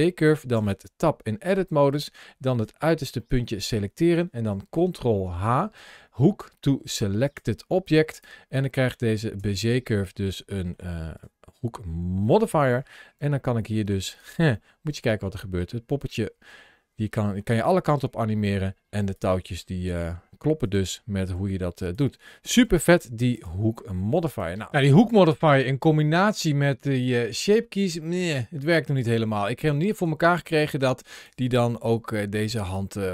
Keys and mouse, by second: 0.4 Tab, 1.8 click, 3.1 middle click, 5.1 ctrl+h, 8.0 click, 9.2 Tab, 9.9 middle click, 11.0 click, 12.1 shift+middle click, 13.0 g, 14.0 right click, 14.5 middle click, 15.2 g, 19.0 click, 19.7 r, 20.5 click, 21.2 g, 21.8 click, 22.5 r, 28.4-29.9 drag, 31.8 g, 32.4 click, 32.9 g.